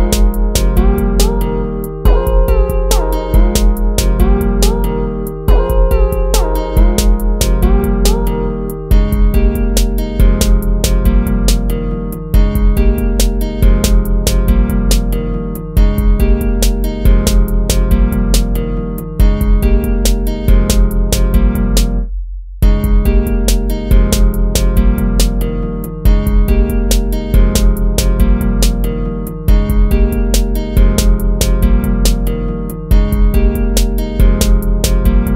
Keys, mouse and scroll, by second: 0.8 ctrl+-, 1.6 ctrl++, 1.8 ctrl++, 3.6 ctrl+-, 4.3 ctrl++, 5.5 ctrl+z, 7.1 ctrl++, 9.0 ctrl+z, 12.6 ctrl+-, 14.8 ctrl+-, 23.7 ctrl+-, 24.3 ctrl++, 26.2 ctrl+z, 27.8 ctrl++.